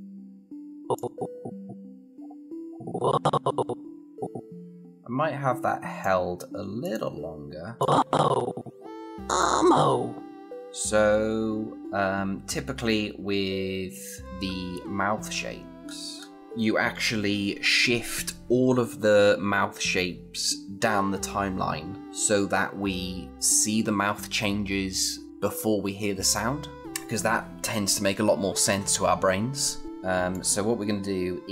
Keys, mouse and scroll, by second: 14.3 scroll down 1, 30.1-31.5 click.